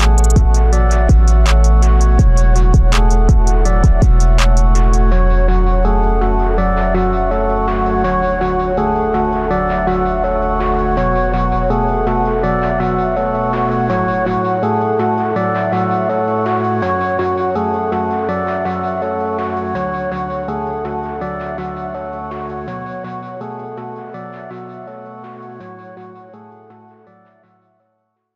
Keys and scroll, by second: 10.6 ctrl+j, 26.6 ctrl+t.